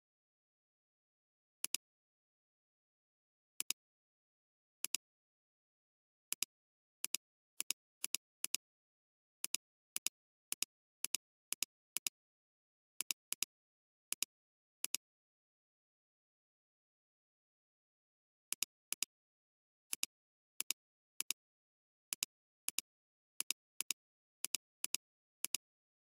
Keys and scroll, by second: 3.6 alt+space, 4.2 alt+space, 4.8 alt+space, 12.0 space, 14.2 space.